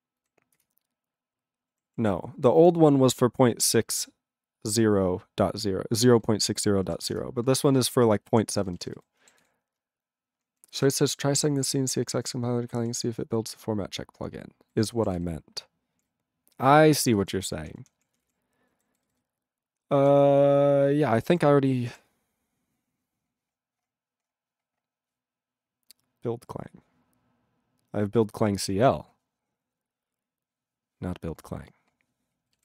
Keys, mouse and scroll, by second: 0.8 ctrl+Return, 1.8 ctrl+=, 2.6 ctrl+n, 7.2 Return, 7.7 ctrl+a, 7.8-8.4 ctrl+p, 8.5 ctrl+n, 8.6 ctrl+e, 8.6 ctrl+n, 8.8 ctrl+e, 8.9 ctrl+n, 9.4 ctrl+s, 10.6 ctrl+a, 10.7 ctrl+n, 10.9 ctrl+e, 10.9 ctrl+n, 11.1-12.9 ctrl+p, 13.0-14.7 ctrl+n, 15.1 ctrl+s, 15.3-16.0 ctrl+p, 16.0 ctrl+n, 16.5 ctrl+n, 16.6 ctrl+n, 16.6 ctrl+n, 16.8 ctrl+n, 17.0 ctrl+n, 17.2 ctrl+n, 17.3 ctrl+n, 17.5 ctrl+p, 17.8 ctrl+p, 18.1 ctrl+p, 18.2 ctrl+p, 18.7 ctrl+n, 18.8 ctrl+n, 19.0 ctrl+n, 19.2-20.1 ctrl+n.